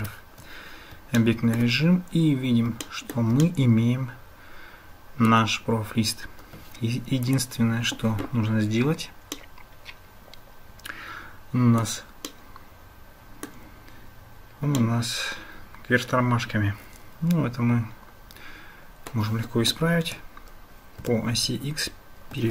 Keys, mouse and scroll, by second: 0.0 Tab, 1.2 shift+middle drag, 1.3 shift+click, 1.4 shift+middle click, 1.6 shift+click, 2.9 shift+click, 3.4-5.3 drag, 7.3 click, 9.3-11.9 middle drag, 12.3-13.6 middle drag, 14.8 middle click, 14.9-19.1 drag, 20.1 r.